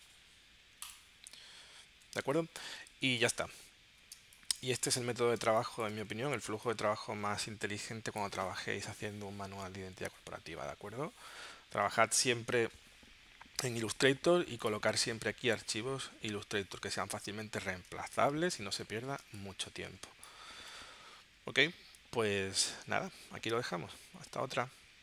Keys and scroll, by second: 2.2 space, 3.1 super+s, 4.1 space, 5.4 space, 6.5 space, 17.9 space, 19.2 space.